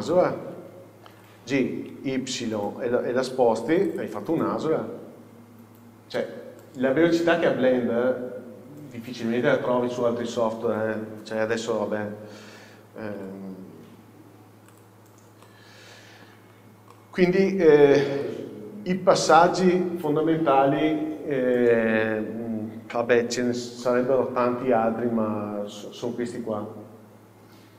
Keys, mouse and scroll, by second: 1.2 g, 4.0 middle click, 4.1 click, 4.4 scroll down 1, 11.2-11.6 scroll down 1, 11.6-14.9 middle drag, 13.3 g, 14.9 click, 15.4 scroll up 1, 15.5-16.7 middle drag, 16.6 scroll down 1, 22.6 scroll up 1, 23.2-25.5 middle drag, 23.4 scroll down 1.